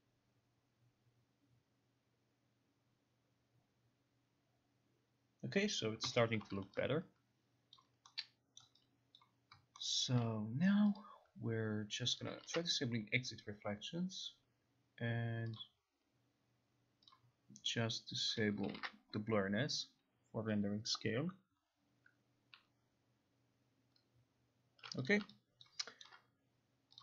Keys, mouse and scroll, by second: 6.5 click, 7.0 click, 7.9 alt+click, 8.7 alt+middle click, 9.3 alt+click, 10.1-10.7 alt+scroll, 11.1 click, 12.3 click, 12.5 ctrl+r, 15.7 click, 17.2 click, 18.4 click, 18.9 ctrl+r, 25.1 click, 26.1 alt+middle click.